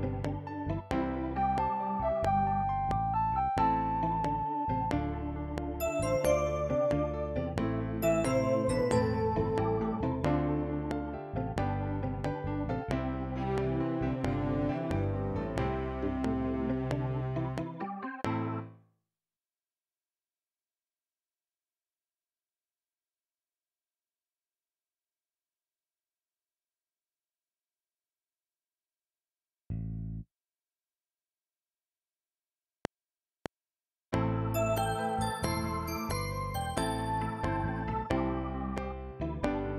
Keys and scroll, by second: 18.6 space, 27.7 ctrl+s, 32.7 F7.